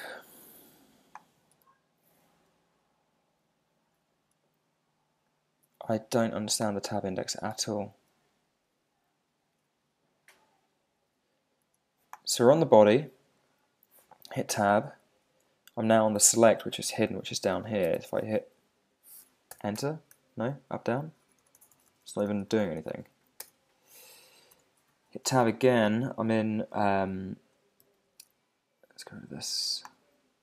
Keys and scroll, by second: 1.5 Tab, 5.1 shift+Tab, 6.0 super+z, 7.5 Tab, 8.9 shift+Tab, 14.5 Tab, 19.8 Return, 20.4 Down, 21.0 Up, 21.2 Down, 21.6 Up, 21.9 Down, 22.2 Up, 22.5 Down, 23.0 Up, 23.1 Left, 23.4 Return, 24.5 Tab.